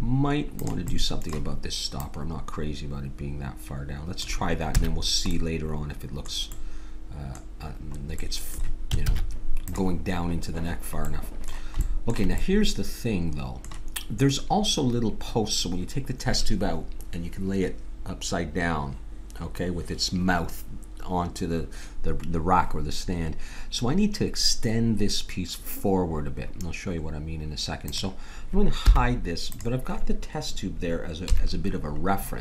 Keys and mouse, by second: 0.6-4.1 drag, 4.7 a, 9.0 ctrl+s, 27.9 click, 28.8 h, 31.2 KP_7.